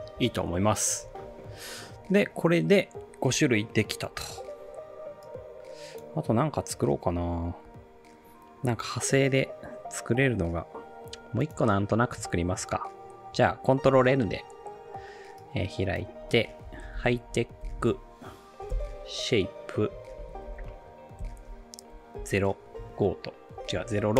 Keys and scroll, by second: 11.0 space, 13.9 ctrl+n, 16.4-21.2 typing, 22.2-23.9 typing.